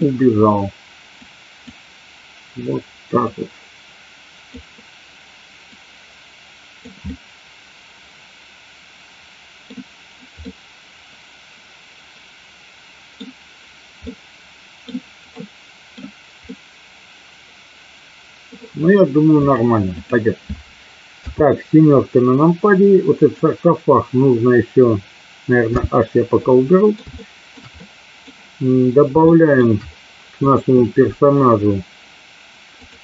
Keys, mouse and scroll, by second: 1.3 click, 3.3-4.6 drag, 5.8-7.0 drag, 7.1-9.8 middle drag, 10.5-13.2 middle drag, 14.2 middle click, 15.5 middle click, 16.6-18.6 middle drag, 19.6 click, 21.2 KP_7, 23.3 click, 25.7 h, 26.4-27.1 middle drag, 27.2-27.6 shift+middle drag, 28.0-28.3 middle drag, 29.3 shift+middle click.